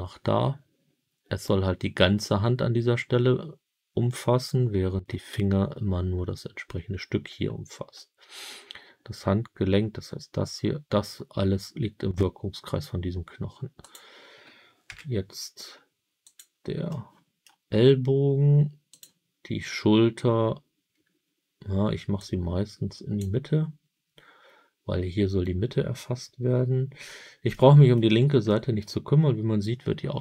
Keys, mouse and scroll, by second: 13.7 click, 14.8 g, 16.2 click, 16.8 middle click, 18.8 click, 22.1-23.1 drag, 27.0-27.4 scroll down 5, 27.4 middle click, 28.4 middle click.